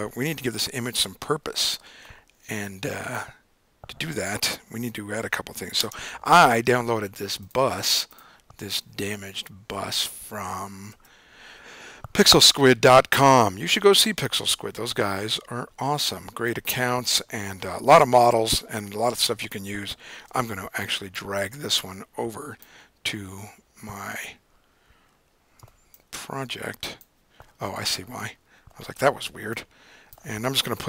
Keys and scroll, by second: 6.2 super+o, 9.1 Up, 9.2 Up, 9.9 Up, 10.9 Return.